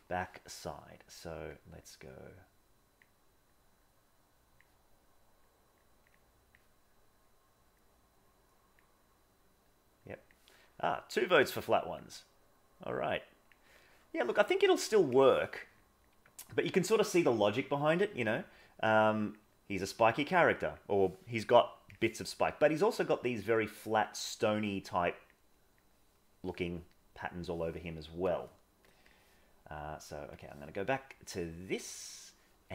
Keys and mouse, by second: 1.5 click, 2.0-3.0 drag, 3.4-4.6 drag, 5.5 click, 6.1 click, 7.8-8.8 drag, 10.1 click, 11.0-12.0 drag, 12.3 click, 13.4 click, 16.1 click, 18.7 click, 19.7-20.7 drag, 23.0 click, 24.0 click, 24.8 click, 31.9 middle click.